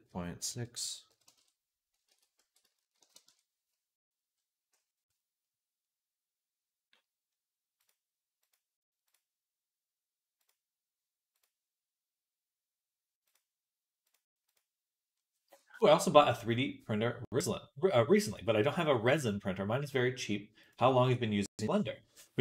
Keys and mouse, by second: 0.5 r, 1.9 ctrl+z, 2.3 r, 7.7 click, 7.8 middle click, 8.2 click, 8.4-10.2 middle drag, 10.2 click, 10.4 middle click, 11.2 click, 11.3-13.9 middle drag, 13.9 click, 14.4-22.4 middle drag.